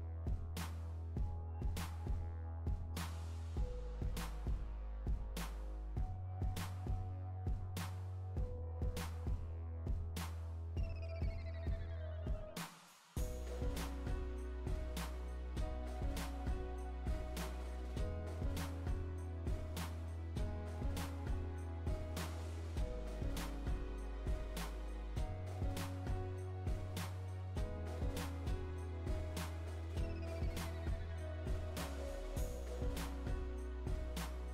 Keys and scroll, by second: 2.8 Return, 24.4 Right, 31.2 Right.